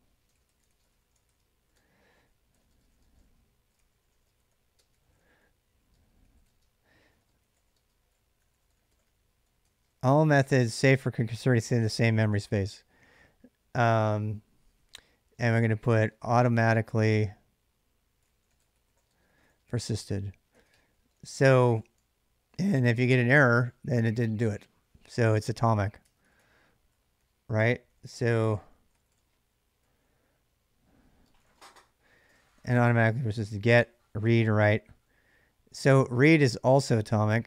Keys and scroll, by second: 0.0-10.6 typing, 14.5-22.2 typing, 25.9 ctrl+[, 26.0-29.6 typing, 30.9-33.0 typing, 34.3 ctrl+[, 34.3 j, 36.2 shift+a, 36.5 space, 36.7 space.